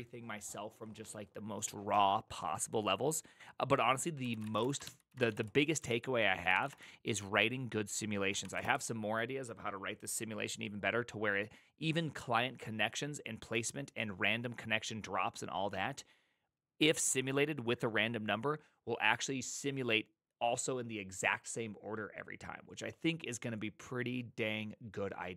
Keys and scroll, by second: 4.1-5.2 typing, 5.0 ctrl+c, 5.3 Return, 5.8 ctrl+u, 6.5 typing, 6.6 Return, 8.4 typing, 8.6 Return.